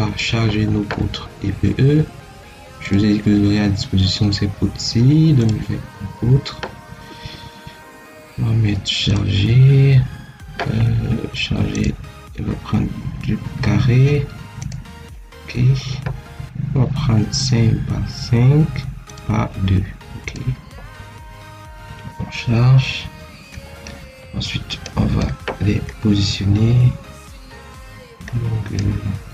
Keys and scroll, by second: 1.4 Escape.